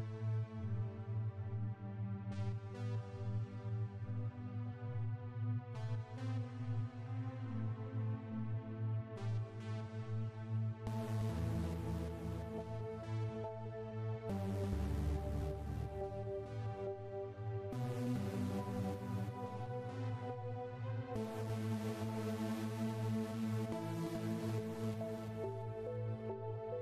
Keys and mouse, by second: 0.7-4.4 drag, 1.2-3.9 right drag, 4.7 click, 8.1 click, 10.0 right click, 11.7 KP_7, 12.8 click, 13.7 click, 14.5 KP_0, 15.9 click, 17.6 s, 18.5 click, 20.0-21.7 drag, 22.2 s, 23.2-24.4 drag, 24.4 s, 25.6 click.